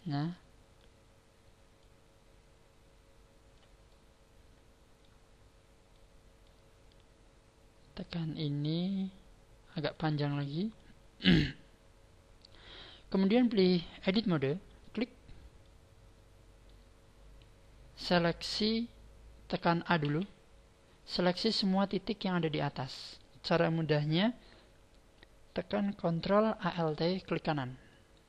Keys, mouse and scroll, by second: 0.3 middle click, 1.7 click, 3.9 middle click, 5.3 scroll up 5, 5.9 middle click, 8.8 click, 9.9 click, 12.5 click, 15.6 middle click, 20.0 a, 27.9 alt+shift+right click.